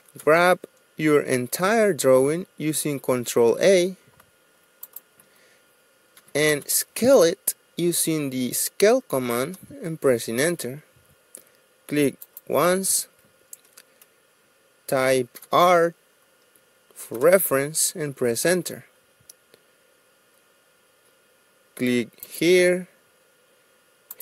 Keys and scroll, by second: 5.5-5.9 typing, 8.9 Return, 14.7 r, 16.4 Return.